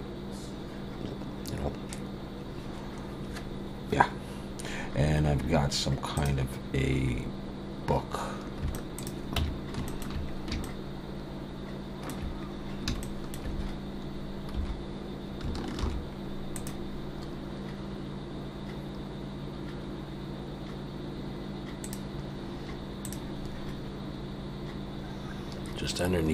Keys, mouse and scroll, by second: 7.2-7.9 scroll up 2, 7.9-8.4 scroll up 3, 8.6 scroll up 1, 8.7 shift+middle click, 9.0 click, 9.4 Tab, 9.9 shift+middle click, 10.3-10.6 scroll up 3, 10.6 shift+middle click, 12.5 scroll up 1, 13.0 shift+middle click, 14.5 3, 15.8 ctrl+r.